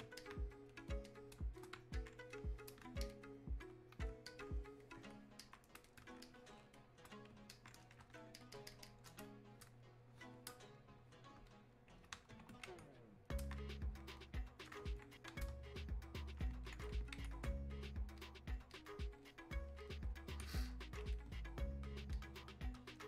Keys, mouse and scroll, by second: 4.3-8.4 ctrl+drag, 11.5 ctrl+shift+click, 14.2-23.0 ctrl+shift+drag.